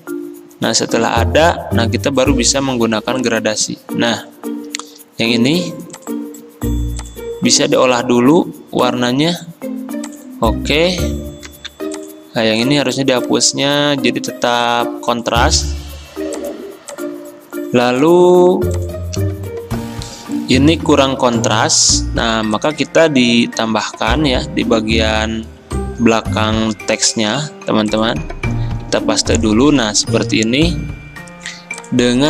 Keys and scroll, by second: 11.6 ctrl+z, 20.1 alt+Tab, 20.1 F10, 22.0 m, 26.7 ctrl+x, 27.4 v, 29.0 ctrl+f.